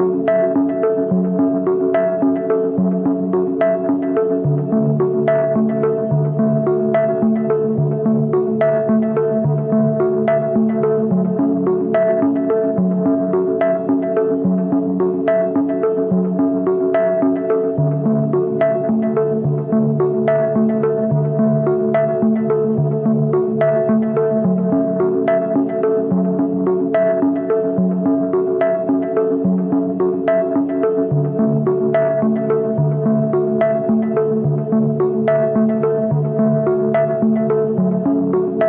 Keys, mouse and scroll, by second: 6.5 Down, 7.1 Right, 7.4 Right, 7.5 Right, 7.7 ., 8.4 Return, 8.4 ., 8.7 Up, 9.0 Down, 10.0 Down, 10.4 alt+click, 10.9 alt+click, 11.3 ctrl+t, 13.7 Return, 13.9 Down, 15.3 alt+click, 17.6 Left, 18.1 Left, 19.2 Left, 19.3 alt+click, 23.0 space, 24.7 alt+click, 26.7 space, 27.7 alt+click, 30.3 Left, 30.5 Left, 30.9 Left, 31.2 Left, 31.7 space, 32.9 alt+click, 35.2 space, 36.4 alt+click.